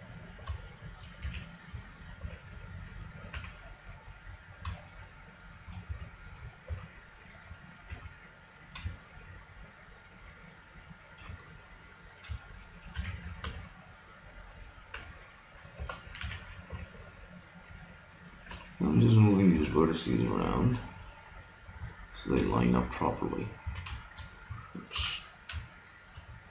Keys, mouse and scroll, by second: 1.2 a, 2.2 b, 3.4 g, 5.9 a, 6.7 b, 7.9 g, 13.0 a, 13.5 b, 15.0 g, 16.2 a, 16.7 b, 18.6 g, 23.6 a, 25.0 KP_3, 26.0-26.5 middle drag.